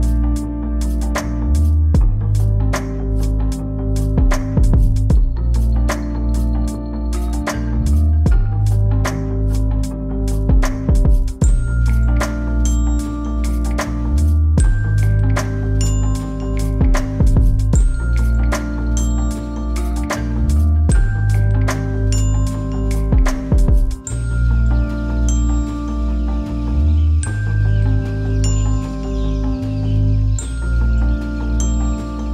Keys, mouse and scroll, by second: 0.1 middle click, 0.6 scroll up 1, 4.1 click, 4.5-5.5 typing, 6.9 click, 7.8 typing, 10.5 typing, 11.1 Return, 13.0 click, 13.6-14.3 typing, 14.5 Return, 16.3 scroll up 1, 17.3-20.5 drag, 20.5 middle click, 22.0 scroll down 1, 22.6 middle click, 24.8-27.0 drag, 29.6 middle click, 30.5 scroll down 1, 30.6 scroll up 1, 30.6 scroll down 1.